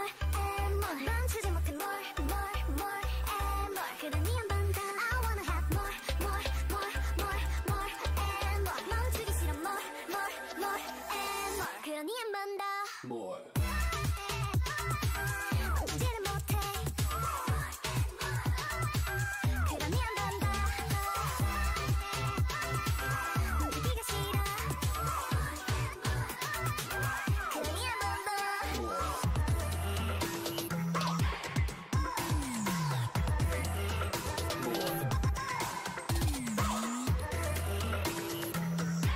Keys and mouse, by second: 1.9 middle click, 4.1 Tab, 5.5 Tab, 6.2 right click, 8.1 Tab, 8.7 z, 9.3 Tab, 10.4 Tab, 12.0 a, 12.3 a, 12.4 w, 14.1-15.8 drag, 14.4 g, 16.9 click, 17.2 w, 18.1 g, 19.3 g, 20.9 g, 22.3 g, 26.8-30.2 typing, 31.3 g, 33.0 z, 34.4 middle click, 35.5-37.9 drag, 36.8 g, 38.8 g.